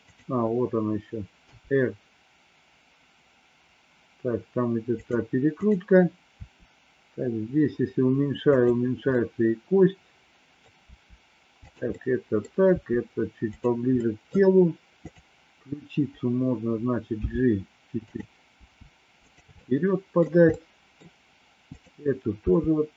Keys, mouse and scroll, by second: 1.3 r, 6.4 r, 9.1-10.6 middle drag, 10.8 r, 12.0 middle click, 12.7 r, 14.0 middle click, 15.1 click, 17.1 g, 18.6 g, 19.7 middle click, 20.6 middle click, 21.6 click, 22.4 g.